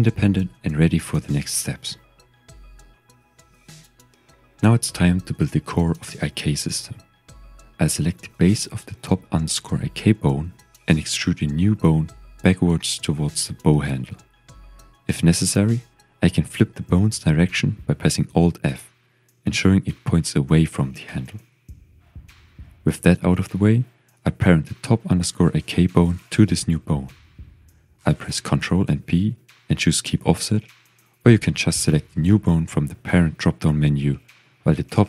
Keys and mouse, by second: 0.5 click, 0.9 click, 1.2 g, 1.8 click, 2.2 shift+middle click, 5.3 shift+click, 6.4 click, 11.4 shift+click, 12.2 e, 13.3 click, 13.6 shift+middle click, 14.5 g, 15.7 click, 16.5 shift+click, 17.4 click, 18.7 alt+f, 19.7 shift+middle click, 22.5 shift+click, 24.8 click, 26.6-32.4 drag, 33.6 click, 34.0 g, 34.9 click.